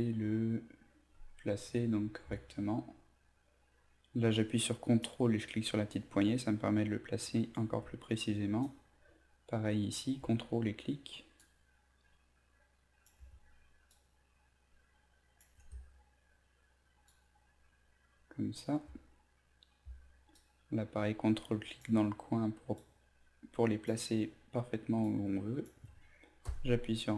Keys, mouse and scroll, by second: 5.0-7.6 ctrl+drag, 8.6 ctrl+click, 11.4-13.0 ctrl+drag, 13.9-15.4 ctrl+drag, 17.0-18.5 ctrl+drag, 20.3-21.8 ctrl+drag, 22.8 ctrl+click, 25.0 ctrl+click.